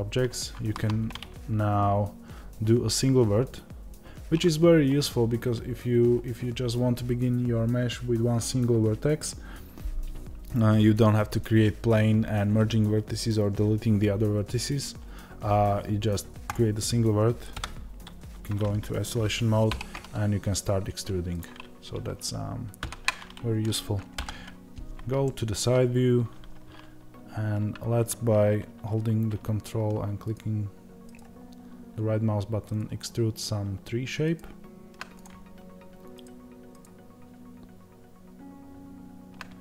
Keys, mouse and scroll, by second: 17.4 KP_Divide, 19.6 e, 22.7 ctrl+z, 25.1-30.2 shift+middle drag, 25.7-30.2 scroll up 1, 30.2 ctrl+right click, 35.1 click, 36.1 ctrl+right click.